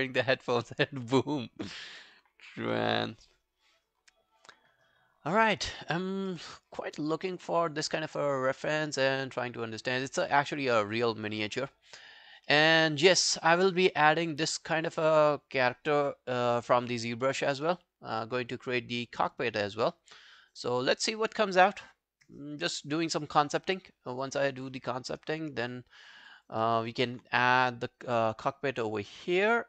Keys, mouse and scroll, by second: 2.0 alt+middle click, 2.4 alt+scroll down 1, 3.2 alt+scroll down 1, 4.0 scroll down 1, 4.0 scroll up 5, 4.9 right click, 6.1 scroll down 4, 6.3 middle click, 6.7-7.1 scroll up 8, 7.3 middle click, 7.7-8.4 scroll up 6, 8.4 scroll down 3, 8.6 middle click, 10.0 scroll down 1, 11.1 scroll down 1, 11.1 scroll up 5, 11.9-12.5 scroll up 3, 12.5 middle click, 13.0 scroll up 1, 13.2 middle click, 13.6 scroll up 2, 17.4-17.7 scroll down 3, 17.7 middle click, 19.6 scroll down 3, 19.9 middle click, 22.6 scroll down 1, 23.7 right click, 25.3 scroll down 1, 25.7 alt+middle click, 26.1 alt+scroll down 4, 26.3 alt+click, 26.6 alt+middle click, 26.9 alt+right click, 28.7 alt+right click, 28.9 alt+middle click, 29.1 alt+right click, 29.3 alt+click.